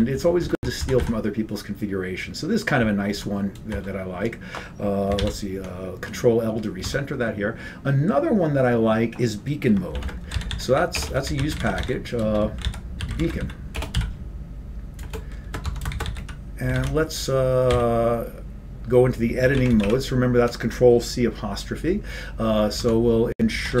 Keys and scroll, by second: 0.9 Down, 1.2 Down, 3.2 Down, 4.0 Return, 5.6 ctrl+l, 7.4 Tab, 10.1-14.2 typing, 15.2 Return, 15.8-18.4 typing, 16.9 ctrl+c, 19.6 ctrl+x, 19.8 ctrl+=, 20.2 ctrl+x, 20.2 ctrl+=.